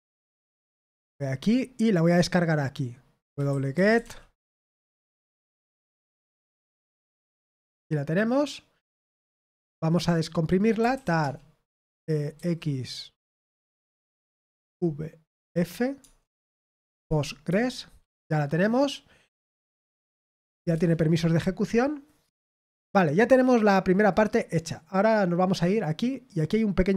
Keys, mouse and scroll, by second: 1.0 click, 2.9-4.4 typing, 5.1 ctrl+v, 6.3 Return, 8.7-12.3 typing, 14.6-17.4 typing, 19.6-21.0 typing, 24.0 click, 25.6 click, 26.8 click.